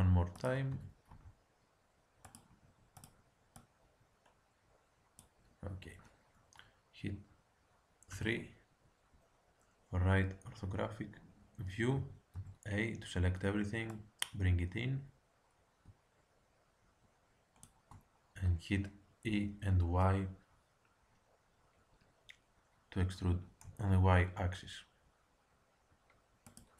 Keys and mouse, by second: 0.3-2.2 drag, 0.6 e, 3.0-5.3 drag, 8.1 KP_3, 12.0 a, 12.3 a, 13.9-15.8 drag, 19.2 e.